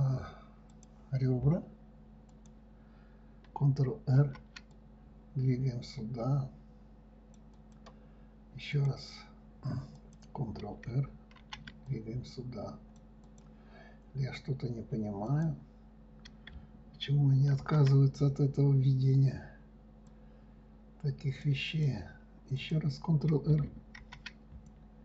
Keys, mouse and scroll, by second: 1.1-2.8 drag, 4.6 ctrl+r, 9.1 click, 10.3 click, 11.8 ctrl+r, 15.7 click, 18.0 ctrl+r, 23.0 click, 24.4 ctrl+r.